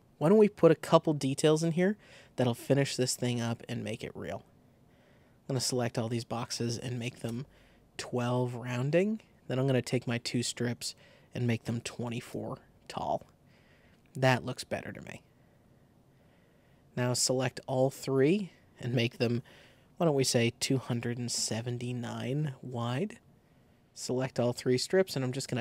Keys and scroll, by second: 6.5-7.4 typing, 11.5-12.5 typing, 20.4-21.4 typing.